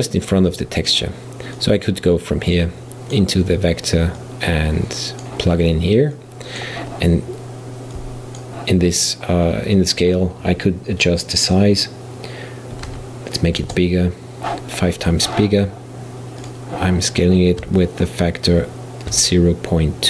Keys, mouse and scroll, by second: 0.3-1.9 drag, 4.2 click, 6.2-11.0 drag, 16.5 click, 17.8-20.0 shift+middle drag.